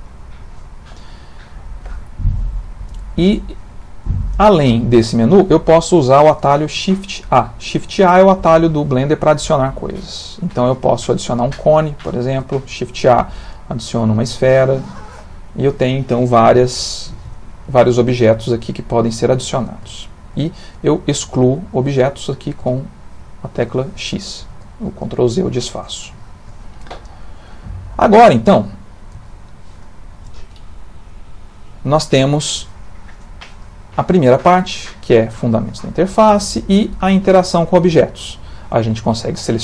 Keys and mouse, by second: 1.4 middle click, 3.2 ctrl+middle click, 4.6 click, 6.0 ctrl+middle click, 7.3 shift+a, 11.8 g, 12.8 shift+a, 14.4 g, 16.5 shift+click, 17.2 x, 18.5 middle click, 19.9 shift+middle click, 21.1 click, 22.1 click, 22.6 x, 24.5 ctrl+z, 25.0-25.4 middle click, 25.1 middle click, 25.2 middle click, 25.7 ctrl+middle click, 26.2 shift+middle click.